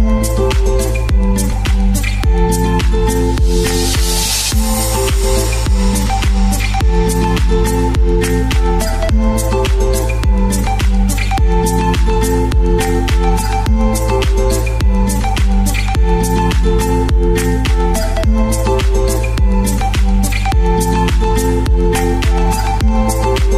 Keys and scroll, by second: 11.0-12.5 typing, 14.1-15.4 typing, 17.0-17.8 typing, 21.3 BackSpace.